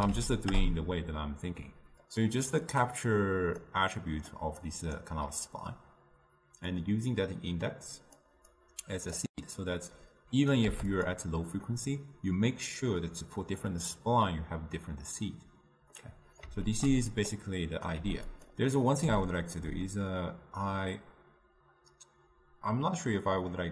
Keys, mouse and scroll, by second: 8.5-11.2 drag, 11.7-22.9 middle drag.